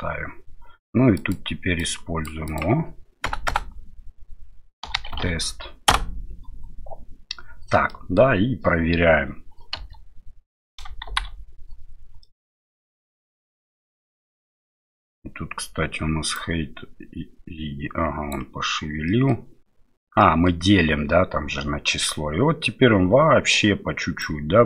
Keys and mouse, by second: 1.8-6.4 drag, 3.5 BackSpace, 7.9 middle click, 9.7 space, 11.1 shift+Left, 12.2 middle click, 13.0-14.5 middle drag, 16.3-18.3 drag, 19.1 middle click, 20.2 middle click, 24.2-24.6 drag.